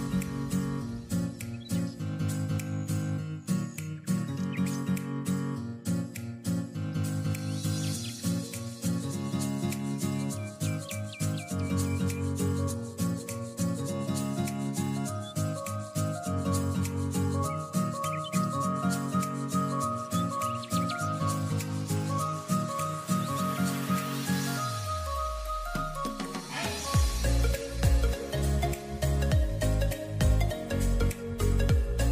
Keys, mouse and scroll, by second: 0.3-0.9 scroll up 1, 0.9 click, 1.3-1.7 scroll down 2, 1.7 click, 2.2-2.9 scroll up 3, 2.9-3.3 scroll down 2, 3.3-4.2 scroll up 3, 4.4-4.7 scroll up 1, 4.7 scroll down 2, 5.0 click, 5.8-6.1 scroll up 1, 6.1-6.6 scroll down 1, 6.6 click, 7.0 click, 9.1 click, 10.3 click, 12.2-13.3 scroll down 1, 13.3 click, 14.0 click, 16.5 click, 18.3-18.9 drag, 19.2 click, 21.8-22.3 drag, 23.7 click, 24.8 click, 26.6-27.8 scroll down 1, 27.8-31.1 drag.